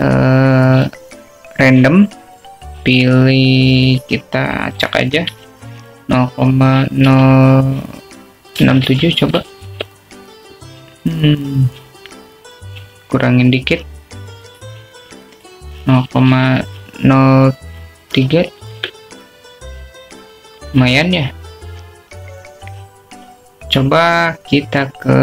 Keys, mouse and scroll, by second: 6.1-12.4 drag, 16.7-22.2 drag.